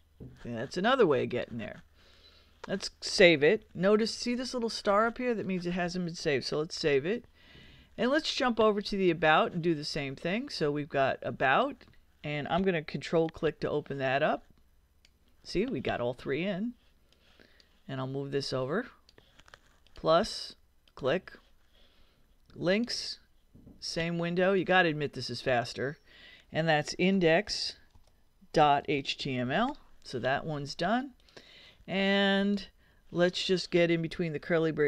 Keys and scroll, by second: 6.7 super+s, 26.6-29.9 typing.